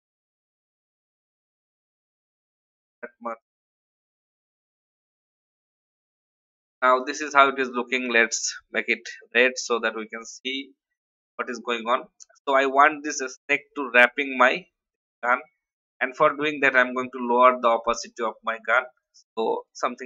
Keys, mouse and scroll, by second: 0.4-1.5 drag, 2.0 shift+Left, 2.9 shift+Right, 3.4 shift+Down, 4.2 shift+Up, 5.2 click, 16.9 shift+scroll down 1, 18.9 click.